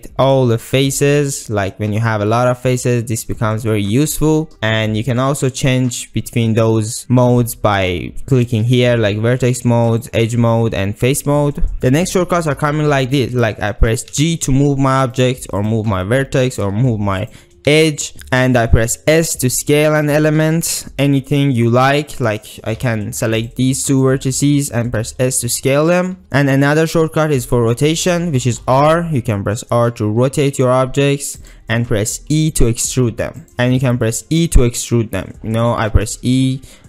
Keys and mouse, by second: 8.5 click, 10.0 click, 11.0 click, 14.2 g, 15.6 click, 15.9 g, 16.5-16.9 drag, 16.9 2, 17.2 click, 17.7 g, 18.9 s, 23.0 1, 25.0 s, 31.4 click, 31.4 r, 32.2 e, 33.5 ctrl+z, 34.1 e.